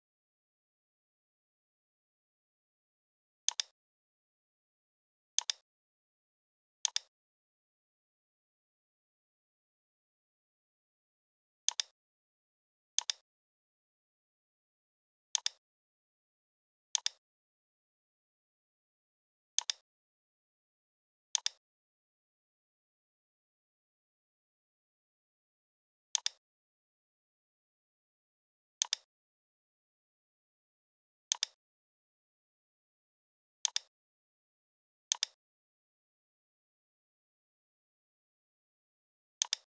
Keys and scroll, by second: 0.9 i, 9.2 g, 23.9 v.